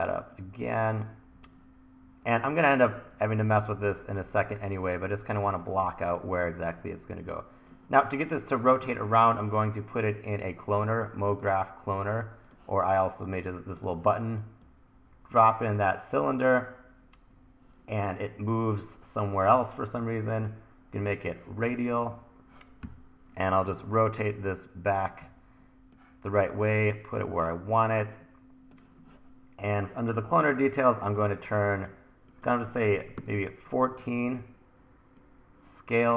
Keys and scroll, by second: 3.2 super+z, 5.9 e, 8.9 1, 22.9 r, 25.2 e, 32.9 KP_1, 33.2 Return.